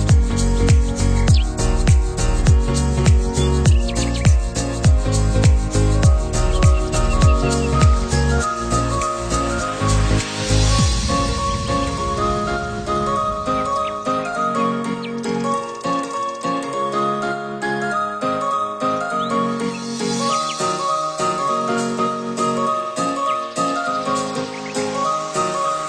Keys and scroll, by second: 19.1 ctrl+c.